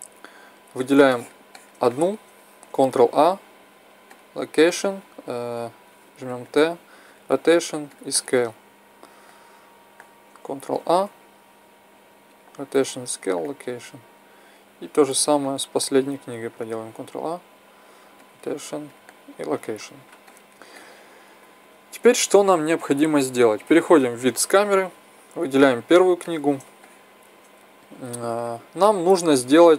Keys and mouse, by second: 3.0 ctrl+a, 6.2 t, 7.4-8.8 drag, 8.8 middle click, 9.5 click, 10.2 right click, 10.7 ctrl+a, 13.4-13.8 drag, 14.5 right click, 16.7 ctrl+a, 19.1-20.2 drag, 20.2-20.9 middle drag, 23.6 KP_0, 26.1-29.7 middle drag.